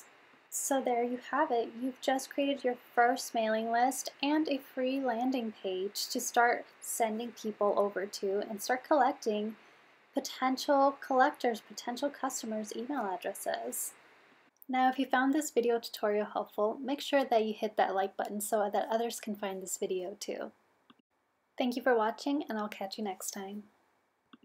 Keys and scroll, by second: 0.4 super+v.